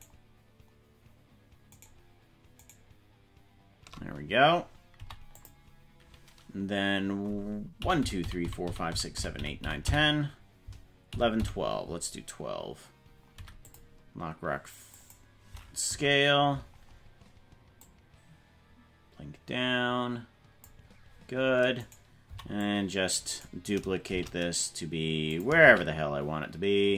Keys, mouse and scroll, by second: 0.5 shift+right click, 2.3 shift+right click, 3.4 shift+right click, 7.9 Right, 8.2 Right, 8.3 Right, 8.5 Right, 8.9 Right, 9.1 Right, 9.4 Right, 9.5 Right, 10.0 Right, 11.3 Right, 11.6 Right, 15.0 click, 16.0 Right, 17.8-20.9 drag, 21.8 right click, 22.2 c, 24.1 shift+d, 25.8 shift+d.